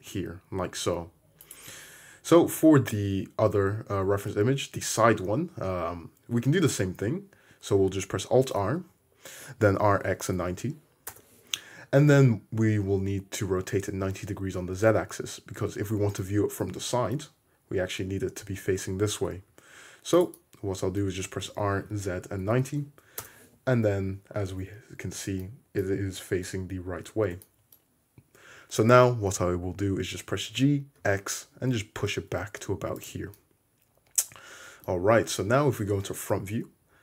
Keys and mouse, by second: 1.5 click, 1.5-6.4 middle drag, 8.6 alt+r, 9.8 r, 19.5 `, 21.5 r, 30.5 g, 35.5 Escape, 36.5 `.